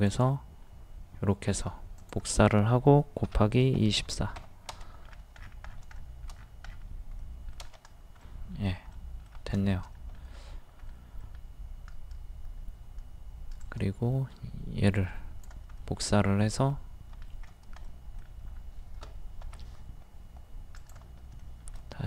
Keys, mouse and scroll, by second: 0.1 ctrl+click, 3.8 KP_2, 4.0 KP_4, 5.0-5.4 scroll down 1, 5.9 shift+middle click, 6.4 scroll down 1, 7.2 middle click, 9.9-12.1 middle drag, 13.6-15.8 drag, 15.8 middle click, 17.4-17.8 scroll up 1, 17.9 middle click, 18.5-19.0 scroll up 1, 19.5 typing, 20.8 click, 21.4 shift+middle click.